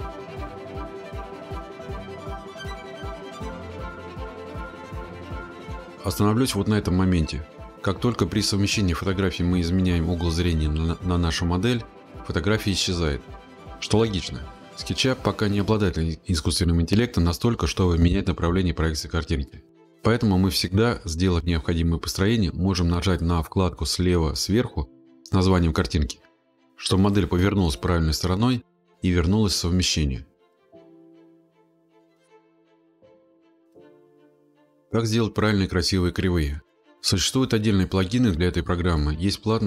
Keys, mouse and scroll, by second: 1.3 click, 3.7 click, 4.7 click, 4.8-5.7 scroll, 6.2 click, 6.6 click, 7.0 click, 7.3 click, 7.5 scroll, 9.5 middle click, 12.6 click, 14.2 click, 15.8 click, 17.4 click, 18.0 click, 18.5-19.0 scroll, 19.6 click, 20.9 middle click, 22.7 click, 28.9-29.6 scroll up 14, 29.6-31.7 scroll, 31.7 click, 31.9 click, 34.1 click, 38.6 click.